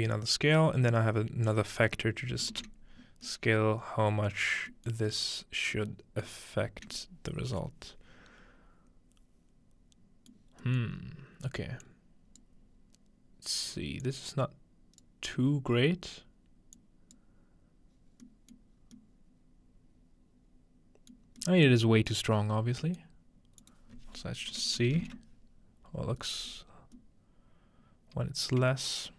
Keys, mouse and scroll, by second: 2.5 ctrl+space, 3.2 ctrl+click, 3.4-5.0 ctrl+middle drag, 6.3 middle click, 10.5 middle click, 10.8-12.5 middle drag, 11.0-11.9 scroll up 2, 11.9-18.3 drag, 11.9-12.5 scroll up 1, 18.3-19.0 middle drag, 18.7-20.0 scroll down 1, 22.2 middle click, 23.0-24.8 middle drag, 23.6-24.8 drag, 26.7 middle click, 26.7-29.1 scroll up 2.